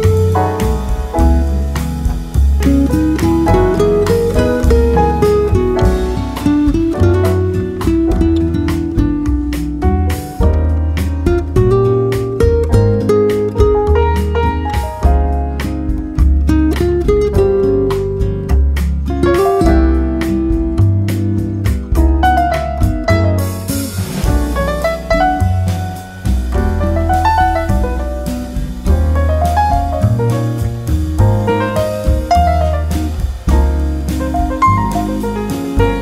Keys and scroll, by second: 4.1 BackSpace, 8.3 ctrl+c, 9.8 ctrl+v, 22.7 ctrl+c, 24.0 ctrl+v, 31.8 Return.